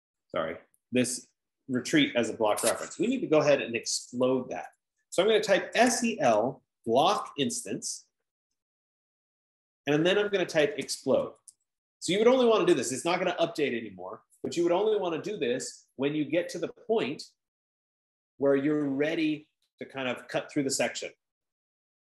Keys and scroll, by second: 3.6 Escape, 6.1-7.6 typing, 9.0 Return, 10.7-12.5 typing, 12.7 Return, 21.4 F15.